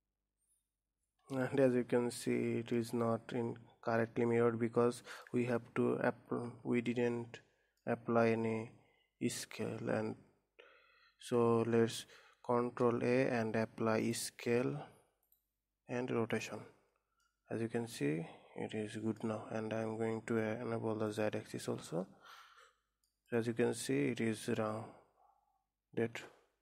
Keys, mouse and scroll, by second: 2.1-5.1 middle drag, 5.3 middle click, 6.2 Tab, 7.0 Tab, 7.4-10.5 middle drag, 13.5 ctrl+a, 15.8-16.9 drag, 17.7-19.8 middle drag, 19.8-20.2 scroll down 3, 21.6 click, 22.1-23.8 middle drag, 23.8 click, 24.2-26.6 middle drag.